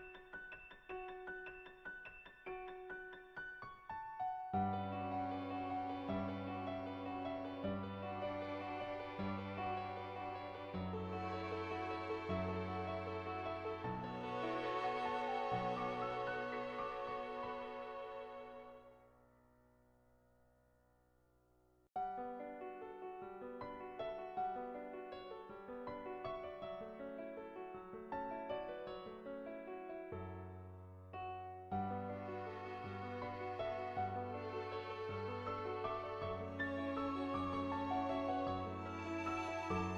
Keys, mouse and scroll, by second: 0.8 click, 2.2-5.9 middle drag, 6.2-7.3 middle drag, 7.9 middle click, 9.4 ctrl+z, 11.6-17.9 drag, 20.5 shift+middle click, 21.4 middle click, 22.1-24.8 middle drag, 25.0 shift+middle click, 25.5 middle click, 26.6 Tab, 27.6 click, 30.5 middle click, 31.7 middle click, 32.2 shift+middle click, 32.7 middle click, 33.7 Tab, 34.6 middle click, 35.4 middle click, 36.3 shift+middle click, 37.2 shift+middle click, 37.5 middle click.